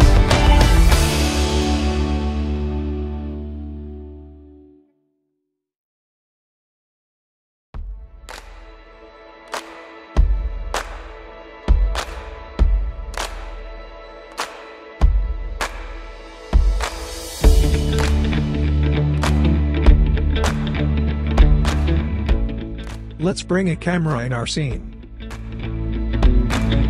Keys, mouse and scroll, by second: 0.1-0.7 scroll up 1, 0.7 click, 2.5-4.6 right drag, 5.6 click, 9.0 ctrl+a, 9.8-12.0 typing, 12.5 Return, 13.5 scroll down 1, 14.6-18.2 drag, 18.1-18.6 scroll up 1, 18.8-19.5 alt+click, 19.6-20.1 scroll down 1, 20.1 click, 20.4 scroll up 1, 20.8-22.0 alt+drag, 22.0 scroll down 1, 23.7 click.